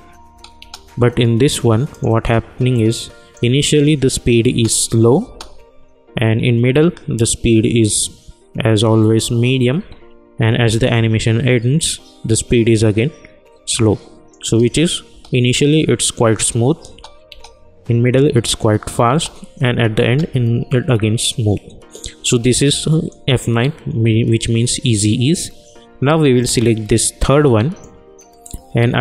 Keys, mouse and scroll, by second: 1.9-4.5 drag, 4.5 space, 9.7 space, 11.8-14.4 drag, 14.4 space, 22.6-29.0 drag.